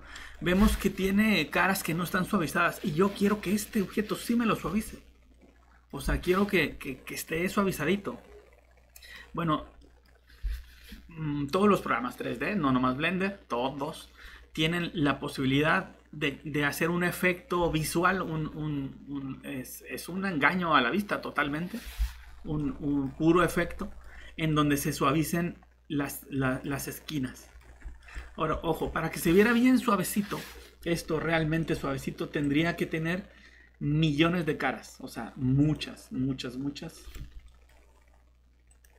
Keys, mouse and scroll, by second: 37.2 shift+Escape.